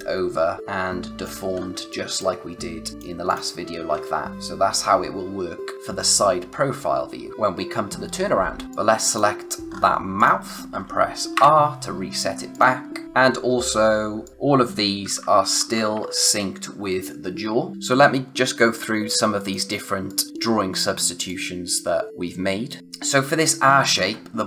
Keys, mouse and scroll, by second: 1.4 space, 1.5 scroll down 1, 1.7 space, 1.9 click, 3.8 scroll up 1, 8.6 space, 9.7-10.1 scroll up 1, 10.1 click, 11.3 r, 12.5 click, 13.0-13.5 scroll up 1, 14.0 space, 14.2 click, 15.0 ], 15.5 [, 15.9 ], 16.6 [, 19.1 click.